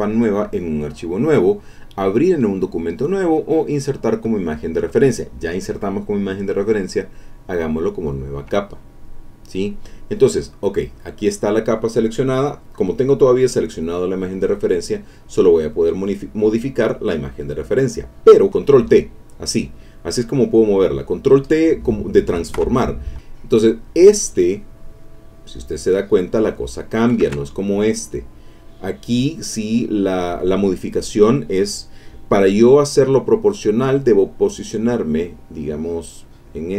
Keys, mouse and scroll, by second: 7.3 click, 8.9 click, 10.8 click, 13.7-16.9 drag, 18.5 ctrl+t, 19.3-20.7 drag, 20.9-23.5 middle drag, 22.6 Escape, 23.5-27.1 drag, 27.2 ctrl+z, 36.4-36.7 drag.